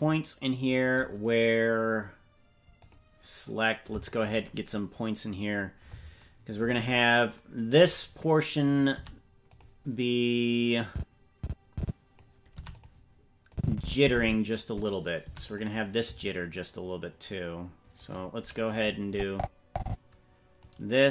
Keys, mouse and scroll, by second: 2.7 click, 6.7-7.3 scroll up 5, 8.9 i, 10.8-12.2 drag, 12.4 i, 13.5-14.8 drag, 15.1 i, 17.9-19.1 right drag, 19.1-20.6 drag.